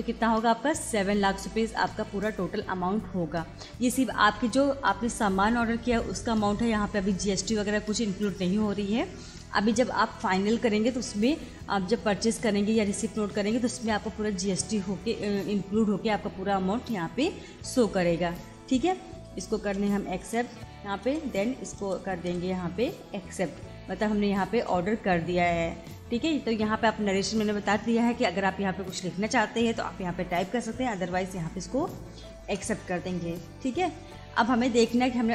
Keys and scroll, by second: 19.3 Return, 24.5 Return, 31.6 Return.